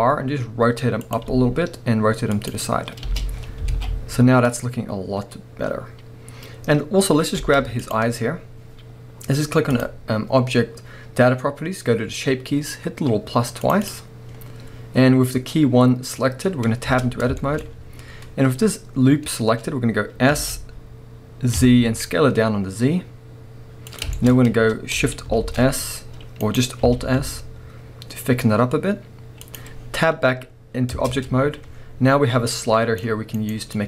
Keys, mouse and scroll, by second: 1.2 click, 1.3 r, 2.5 click, 3.0 space, 5.5 scroll down 2, 6.5-7.0 scroll up 4, 7.3 space, 7.8-8.4 drag, 8.4-9.7 scroll up 1, 9.7-16.9 drag, 16.9 Tab, 17.4 shift+middle drag, 17.6-18.6 scroll up 2, 18.6-20.4 scroll up 1, 24.0 click, 24.1-25.4 scroll up 3, 25.4 alt+shift+s, 26.5 right click, 26.9 alt+s, 29.6 click, 29.8-30.1 scroll down 1, 30.9 Tab, 32.5 click, 33.5 right click, 33.7-33.8 drag.